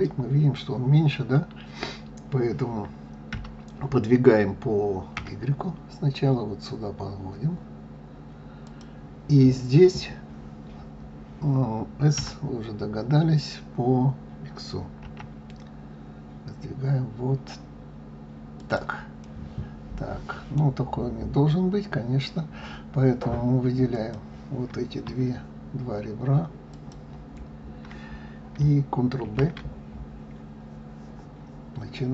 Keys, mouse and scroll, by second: 3.3 g, 12.1 s, 19.1-20.9 middle drag, 20.9-23.8 scroll up 4, 23.8 click, 26.6 shift+click, 29.2 ctrl+b.